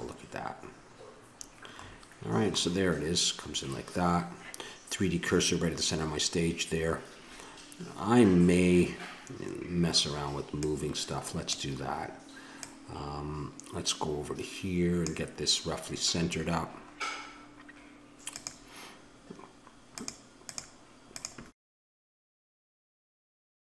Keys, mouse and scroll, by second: 0.0-1.7 drag, 1.9-3.2 middle drag, 3.3 middle click, 10.6-14.2 middle drag, 14.2-16.2 drag, 18.3-23.7 drag.